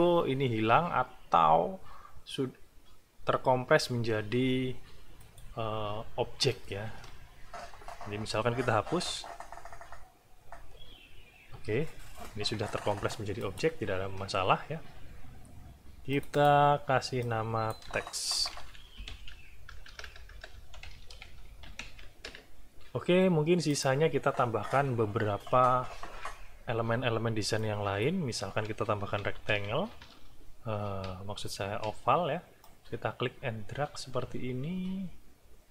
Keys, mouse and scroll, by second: 5.2 click, 9.1 Delete, 13.4 click, 16.1 click, 17.2 click, 18.1-22.3 typing, 20.5 Caps_Lock, 23.7 click, 27.6 click, 29.2 r, 29.5 e, 30.2 ctrl+scroll up 2, 31.6 ctrl+scroll up 2, 32.6-35.7 ctrl+drag.